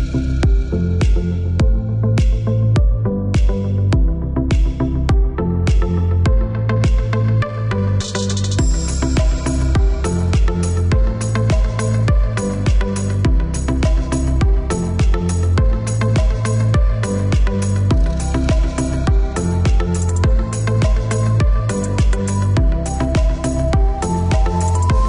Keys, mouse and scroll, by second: 1.0 Escape, 2.4 click, 6.7 click, 7.6 click, 8.3 click, 9.0 KP_1, 9.2 KP_2, 9.4 KP_Decimal, 9.7 KP_5, 10.0 KP_Enter, 11.6 click, 14.8 click, 15.4 click, 16.0 KP_2, 16.2 KP_5, 16.4 KP_Enter, 18.2 click, 21.1 click, 22.8 click, 24.1 KP_5, 24.5 KP_Enter.